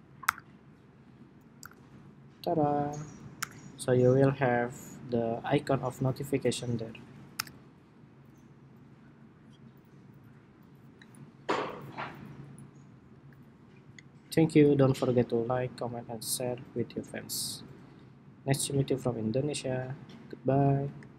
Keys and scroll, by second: 1.2 super+-, 1.3 super+-, 2.6 super+-, 3.1 super+=, 3.8 super+=, 7.1 super+-, 8.3 super+-.